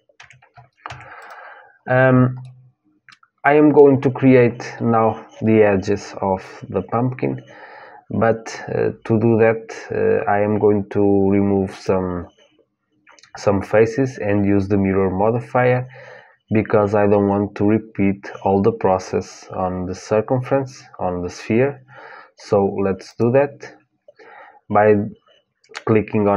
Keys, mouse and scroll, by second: 0.0 Tab, 0.6 Tab, 0.9-2.9 drag, 2.9-4.2 middle drag, 11.4-18.8 drag, 22.8-26.3 drag.